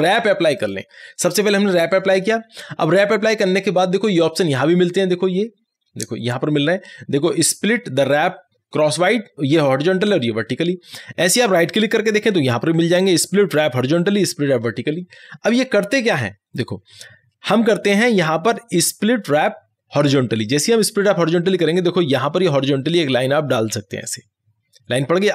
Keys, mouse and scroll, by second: 0.6 click, 11.7 click, 11.8 right click, 20.5 click, 24.1-25.3 drag.